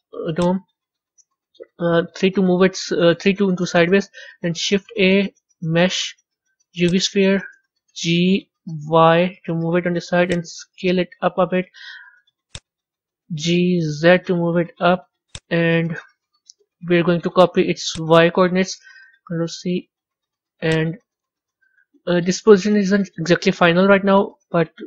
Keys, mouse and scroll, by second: 0.2 click, 1.9 KP_3, 4.6 shift+a, 7.9 g, 10.6 s, 13.3 g, 17.8-20.6 drag.